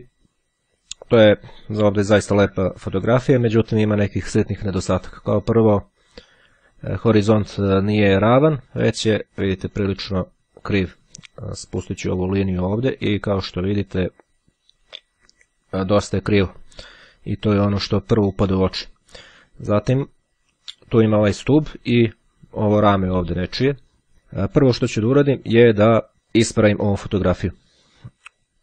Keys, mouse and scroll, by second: 11.9-20.6 drag.